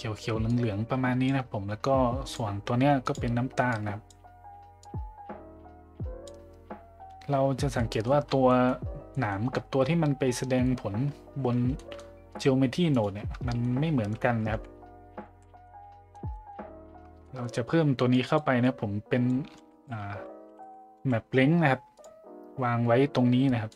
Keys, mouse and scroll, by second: 2.3 click, 3.1 drag, 7.7 middle drag, 8.5 middle click, 9.1 middle drag, 11.7 middle drag, 13.5 middle click, 15.6-16.1 middle drag, 15.6 a, 16.3 middle drag, 17.3 middle click, 18.1 click, 18.6-19.3 drag, 19.5 shift+a.